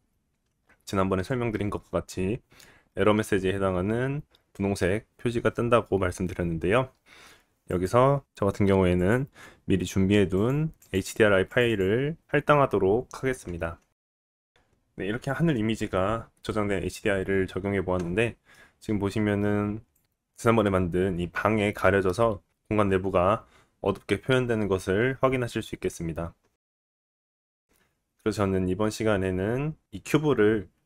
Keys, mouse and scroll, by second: 8.1 click, 12.2-13.5 drag, 14.3 scroll down 1, 14.5-17.6 drag, 16.1 middle click, 17.6-30.8 middle drag, 22.2-23.1 scroll up 2, 26.5-27.2 scroll down 2.